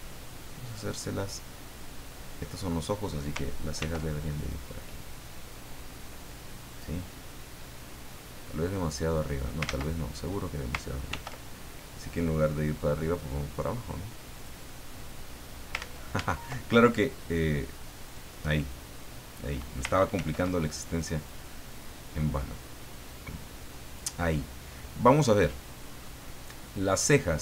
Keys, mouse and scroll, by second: 0.3-1.8 middle drag, 3.8 ctrl+r, 4.4 ctrl+click, 6.7 click, 8.1-9.6 middle drag, 9.6 ctrl+z, 11.1 ctrl+r, 12.1 click, 14.3 click, 14.6-15.8 middle drag, 15.7 ctrl+click, 15.8 ctrl+z, 18.1 click, 19.3 click, 20.1 ctrl+r, 21.2 click, 23.8 click, 26.0-27.1 middle drag.